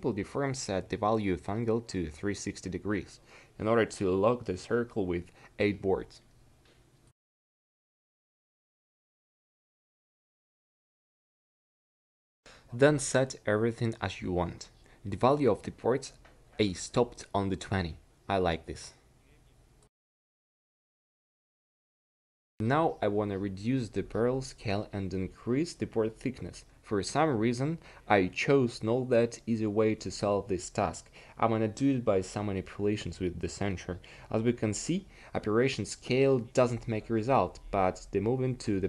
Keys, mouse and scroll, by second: 4.5-11.2 middle drag, 11.2-19.6 drag, 21.3 middle click, 24.2 q, 30.2 s, 38.3 s.